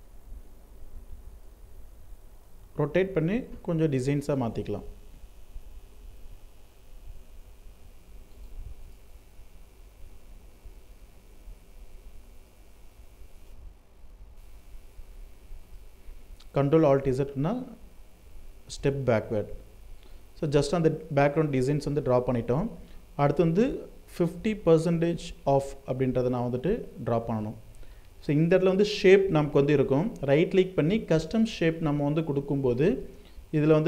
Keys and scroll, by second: 13.6 ctrl+alt+z.